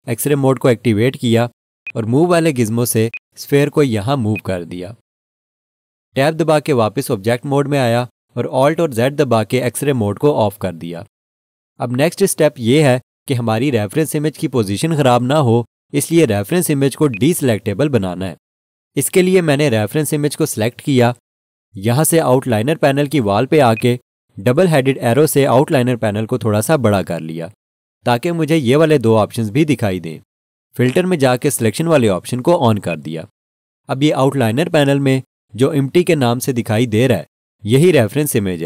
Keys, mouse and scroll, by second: 0.2 alt+z, 1.8 alt+shift+click, 3.4 click, 7.5 Tab, 9.1 alt+z, 17.1 click, 23.7 click, 31.9 click.